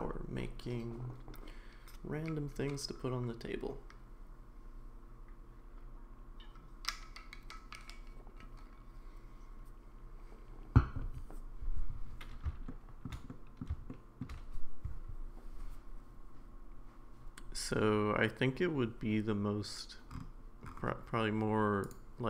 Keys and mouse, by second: 12.7-13.1 shift+middle drag, 13.3-13.6 middle drag, 13.9-14.2 shift+middle drag, 21.8 click.